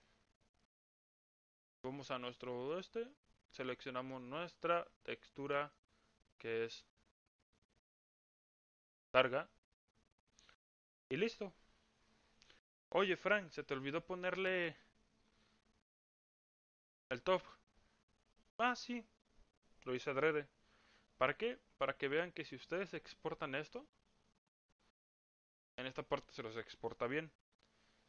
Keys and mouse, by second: 1.6 click, 2.7 click, 4.8-5.7 drag, 6.6 click, 14.3 click, 21.4 click, 22.7 click, 23.7 click.